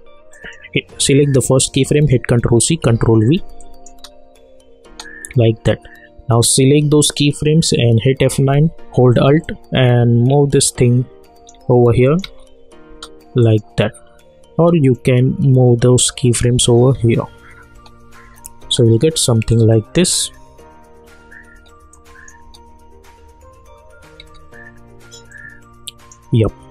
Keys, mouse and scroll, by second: 2.4 ctrl+c, 2.8 ctrl+v, 3.6 click, 3.8 click, 3.9 space, 5.6-7.8 drag, 7.9 F9, 9.7-11.6 alt+drag, 12.2 space, 13.4-16.6 drag, 16.6 space, 19.5 click, 20.0 space, 21.9 click, 22.5 space, 25.3-26.7 drag.